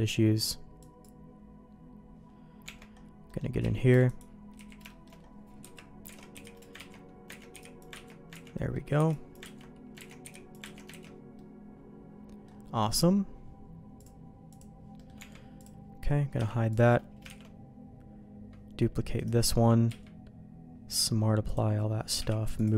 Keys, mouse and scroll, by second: 0.8 click, 2.6 Tab, 3.3 middle click, 3.6 z, 3.9 b, 4.5 z, 4.9 shift+middle click, 5.6 KP_Decimal, 6.1 alt+a, 6.3 b, 6.8 ctrl+q, 7.3 ctrl+x, 7.5 b, 8.1 ctrl+q, 8.4 ctrl+x, 8.5 middle click, 9.0 b, 9.6 ctrl+q, 10.1 ctrl+x, 10.2 b, 10.6 ctrl+q, 10.9 ctrl+x, 11.3-12.4 middle drag, 14.5 click, 15.0 middle click, 15.2 Tab, 15.6 click, 16.4 h, 16.7 click, 17.4 shift+d, 19.9 q, 22.2 m.